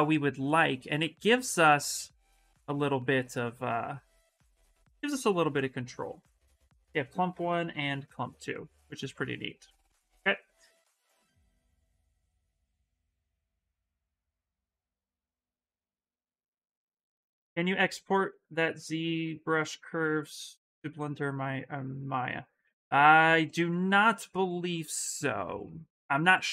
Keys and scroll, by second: 0.5 shift+f, 2.1 ctrl+z, 2.5 s, 6.3 ctrl+z, 9.9 ctrl+z, 11.0 s, 15.7 s, 21.2 s, 24.9 s.